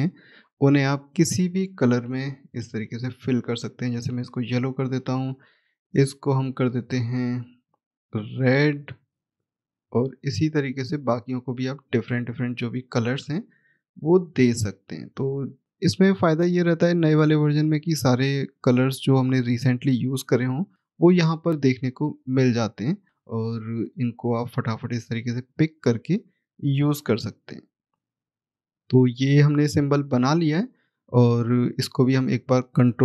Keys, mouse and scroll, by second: 3.4 click, 7.3 right click, 8.4 shift+click, 12.4 right click, 14.3 click, 19.0 click, 22.7 right click, 23.9 click, 26.8 right click, 28.3 click, 31.1 click.